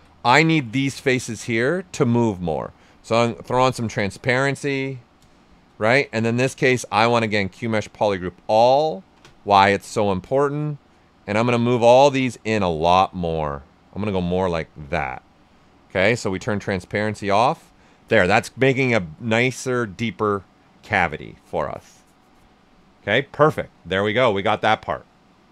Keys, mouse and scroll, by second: 3.2 click, 5.8 ctrl+z, 6.4 space, 7.3 click, 10.1-14.7 drag, 14.7 shift+f, 15.2 right click, 16.1 click, 17.0 shift+f, 17.3-23.2 right drag, 20.7 typing.